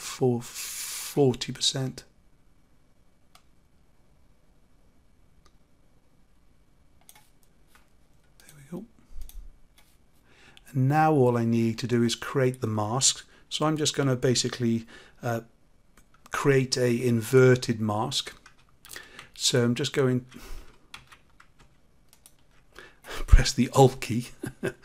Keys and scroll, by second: 18.8 ctrl+z.